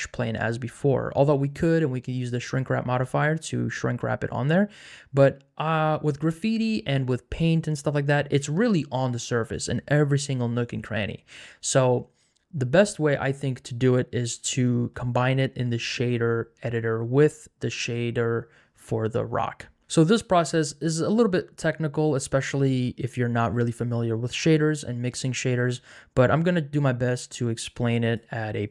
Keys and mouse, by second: 10.8 middle click.